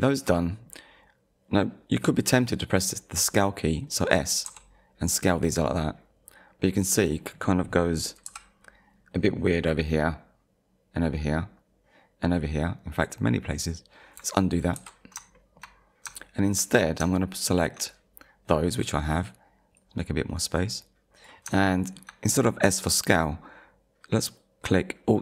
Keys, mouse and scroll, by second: 4.5 s, 7.0 click, 8.3 KP_1, 11.6 scroll up 1, 14.8 ctrl+z, 15.4 shift+middle click, 16.2 shift+middle click, 17.2 shift+middle click, 19.8 click, 21.7 shift+middle click.